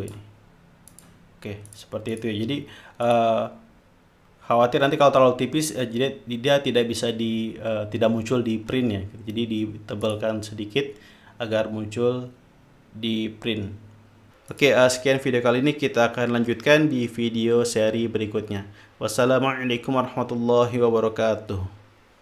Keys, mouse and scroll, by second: 0.9 click, 1.7-3.6 drag, 10.0 click.